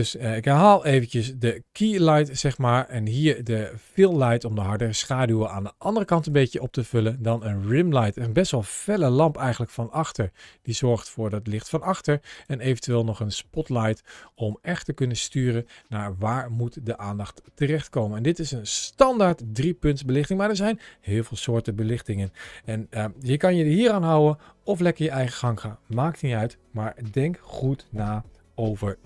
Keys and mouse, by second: 1.3 g, 3.7 g, 6.0 click, 7.2 click, 7.9 click, 8.9 g, 10.5 click, 12.2 click, 12.8 g, 14.2 click, 15.7-19.7 middle drag.